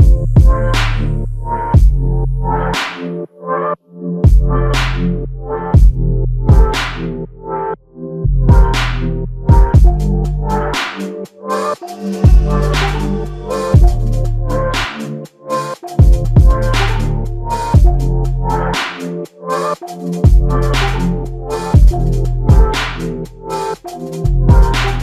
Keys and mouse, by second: 5.3 r, 10.4 f, 11.6 shift+click, 14.5 alt+click, 18.4 alt+shift+click, 19.0 alt+shift+click, 20.9 alt+shift+click, 23.5 f, 24.8 alt+click.